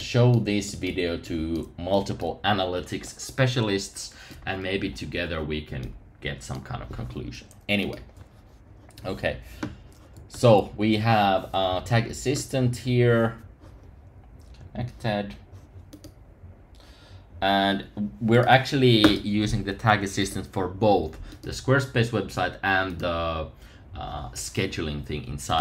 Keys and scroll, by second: 10.3 super+r.